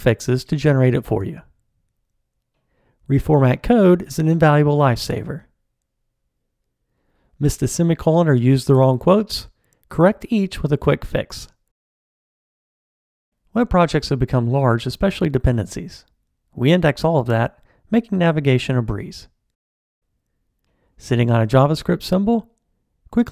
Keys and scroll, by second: 3.5 alt+super+l, 7.8 alt+Return, 22.3 super+b.